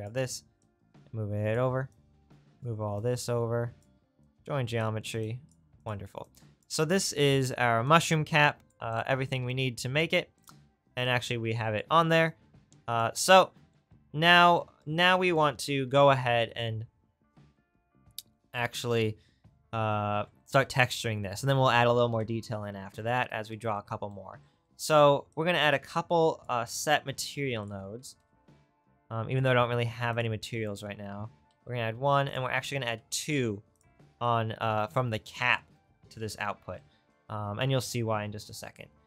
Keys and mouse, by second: 5.5 click, 6.0 right click, 6.2-9.1 drag, 9.1-11.7 right drag, 9.6-11.7 drag, 26.9 shift+a, 30.2-32.8 drag, 31.5 shift+d, 33.1 shift+d, 37.0-38.9 right drag.